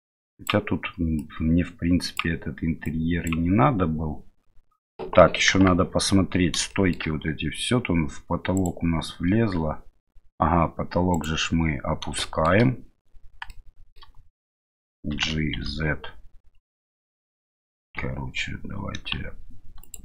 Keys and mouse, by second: 1.2 click, 2.8 click, 5.5 KP_1, 6.7 shift+middle drag, 8.5 right click, 12.2-12.5 shift+middle drag, 13.5-13.9 shift+middle drag, 15.1 g.